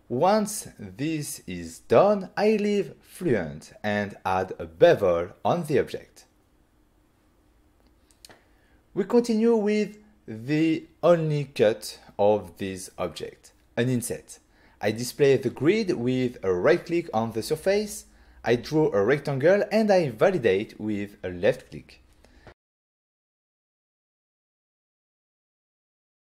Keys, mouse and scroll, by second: 2.3 click, 2.8 click, 3.4 middle click, 4.6 middle click, 5.9 click, 7.0 click, 7.6 f, 8.8 click, 9.5 middle click, 10.0 middle click, 10.3 ctrl+middle click, 11.6 f, 13.4 click, 14.8 click, 16.5 middle click, 17.9 middle click, 18.4 middle click, 19.1 right click, 20.1 middle click, 23.5 click, 24.0 shift+click, 25.2 shift+click.